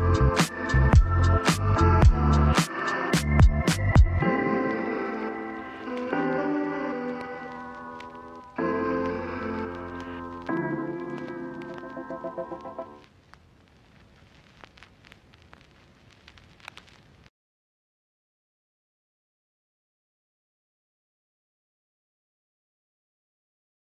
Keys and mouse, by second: 0.2 shift+a, 17.2 middle click, 18.4 shift+middle click, 18.9 middle click, 22.0 middle click, 23.4 click, 23.8 middle click.